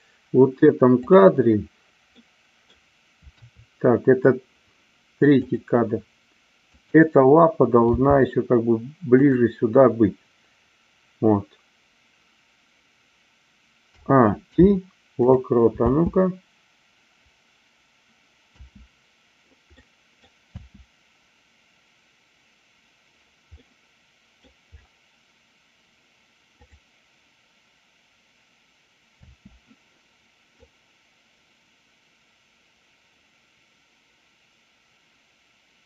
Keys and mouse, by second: 0.9 click, 2.0 middle click, 3.3 KP_3, 5.4 drag, 6.6-7.8 drag, 7.9 g, 9.1 click, 13.8 a, 14.4 i, 15.7 space, 19.8-20.4 middle drag, 23.7 middle click, 26.6 click, 29.2 space, 30.5-35.8 drag.